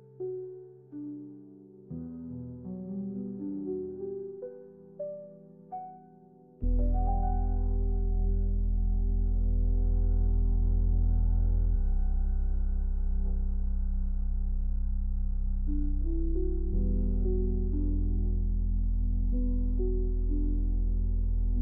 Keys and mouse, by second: 3.0-4.9 drag, 5.9 r, 6.4 r, 9.1 r, 10.1 a, 10.4 a, 10.8 z, 13.9 alt+shift+z, 14.8 middle click.